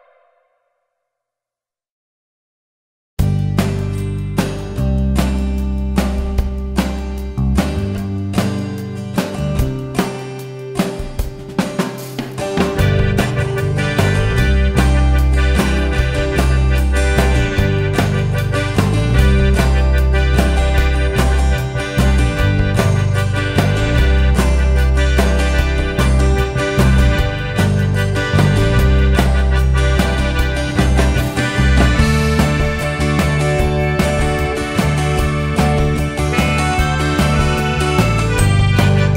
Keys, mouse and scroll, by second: 1.5-4.8 drag, 4.8 Delete, 8.4 click, 9.8 ctrl+t, 12.1 `, 13.6 click, 17.8-19.5 drag, 20.2-23.4 drag, 25.2 `, 26.3-31.2 drag, 31.2 scroll down 1, 31.2 `, 32.3 scroll up 1, 32.5 `, 33.6-34.0 scroll down 1, 34.0 scroll up 1, 34.2 `, 36.6 click, 36.6 KP_0, 37.1 scroll down 1, 37.2 `.